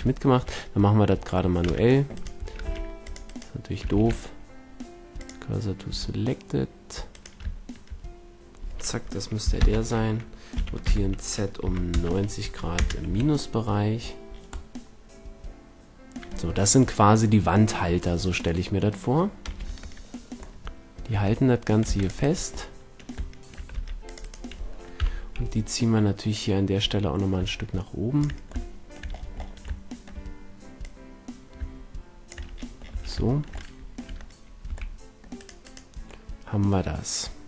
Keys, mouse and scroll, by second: 0.0-0.7 middle drag, 1.6 c, 2.2 a, 2.6 c, 3.8 shift+s, 5.8 a, 7.0-9.0 drag, 9.5 ctrl+l, 10.4 r, 13.0 a, 19.6 Tab, 21.0 Tab, 21.8 c, 22.2-24.6 middle drag, 23.6 c, 24.9 KP_1, 26.3-28.1 drag, 28.6-32.4 middle drag, 32.8 a, 33.2-33.8 middle drag, 34.0 Tab, 34.6 a, 36.6-37.2 middle drag.